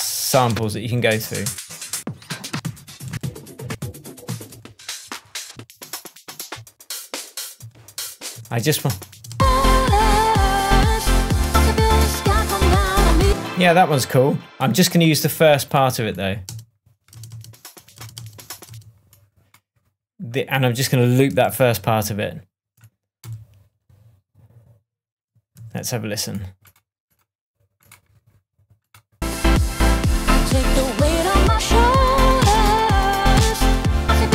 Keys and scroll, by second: 0.4 space, 0.9 Down, 2.4 Up, 8.3 Down, 9.1 space, 13.2 space, 16.4 space, 21.4 super+d, 23.3 super+d, 25.5 super+d.